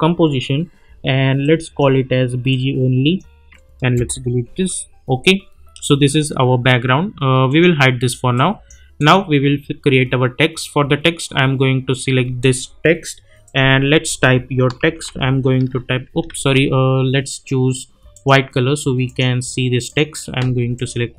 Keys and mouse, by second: 1.4-3.4 drag, 3.9 Return, 7.4 click, 12.4 click, 14.7 shift+c, 15.0 shift+r, 16.2 ctrl+a, 18.1 click.